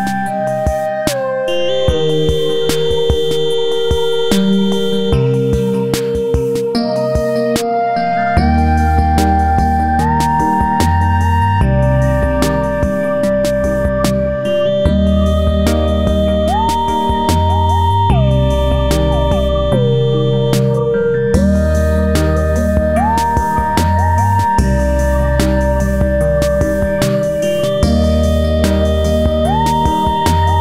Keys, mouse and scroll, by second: 0.9-2.7 drag, 2.7-4.0 drag, 4.7 scroll up 1, 5.1-7.5 drag, 9.8 F4, 10.7 z, 10.9-13.7 drag, 14.0 click, 17.1 click, 18.3 F4, 19.1 scroll up 1, 20.1-22.4 drag, 23.5 click, 24.3-28.7 drag, 28.9 click, 30.4-30.6 scroll up 1.